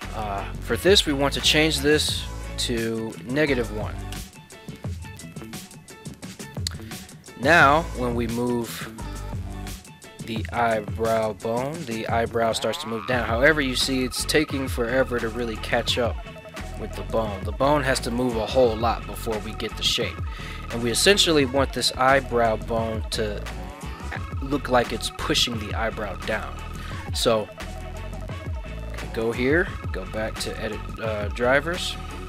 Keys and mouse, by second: 6.2 right click, 7.1 right click, 7.8 right click, 8.2 ctrl+Tab, 8.5 right click, 9.2 g, 9.8 z, 20.8 right click, 28.2 right click, 28.3 ctrl+Tab, 28.4 right click, 29.6-32.2 right drag.